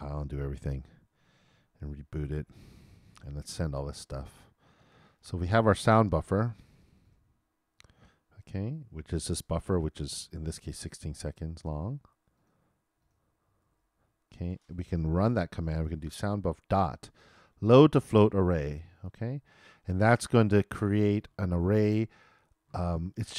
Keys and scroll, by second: 2.2 super+b, 4.8 super+Return, 9.3 super+c, 13.6 super+v.